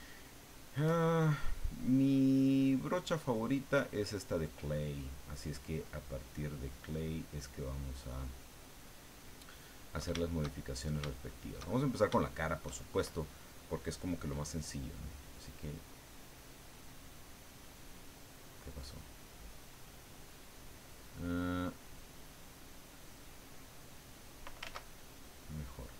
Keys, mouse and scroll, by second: 1.4 click, 3.4 click, 10.5-11.6 shift+middle drag, 11.7 shift+click, 12.2 shift+click, 14.7-18.0 drag, 18.7-20.3 drag, 21.8 click, 23.5-24.6 drag, 24.6 ctrl+z, 25.1 ctrl+click.